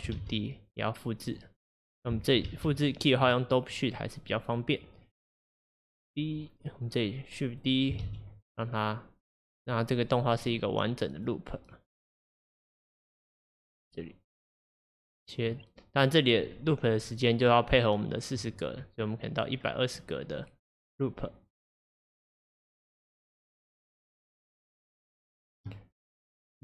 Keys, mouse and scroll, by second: 0.2 shift+d, 2.5 ctrl+Tab, 3.8-8.1 drag, 8.1 shift+d, 9.8-26.6 drag, 16.5-17.2 scroll down 2, 19.9 scroll down 5.